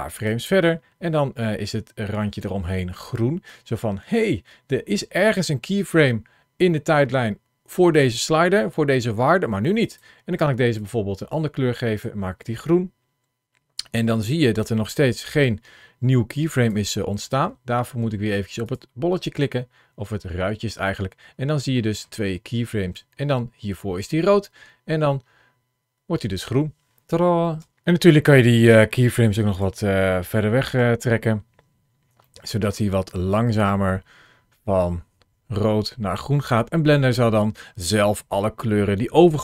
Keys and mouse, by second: 9.7 click, 14.7 ctrl+shift+a, 21.6 middle click, 22.8-26.3 drag, 27.5 space, 28.8 click, 30.1 g, 32.1 shift+middle click, 33.1-39.4 drag.